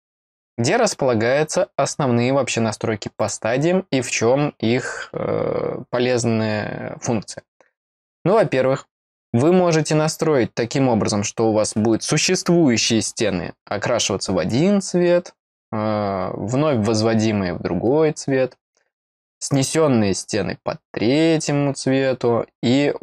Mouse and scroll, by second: 3.1 click.